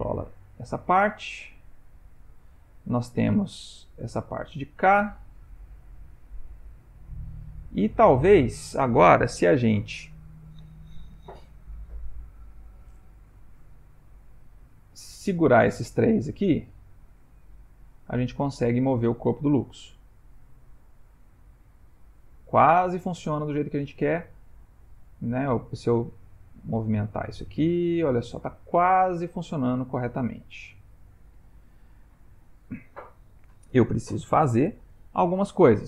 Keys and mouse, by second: 3.2 click, 3.5 g, 14.8 shift+click, 15.5 click, 16.5 shift+click, 17.1 shift+click, 18.3 g, 22.6 click, 23.5 shift+click, 24.3 click, 25.4 s.